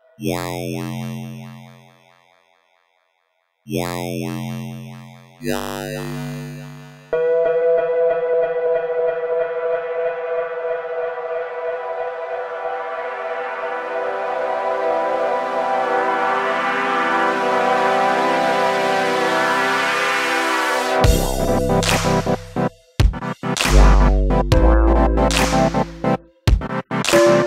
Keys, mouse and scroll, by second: 1.4 shift+d, 2.1 click, 3.5 click, 4.5 click, 5.6-6.7 drag, 7.1 click, 7.7-8.1 drag, 9.2 click, 9.7 click, 18.0 click, 24.1 click, 24.9 click.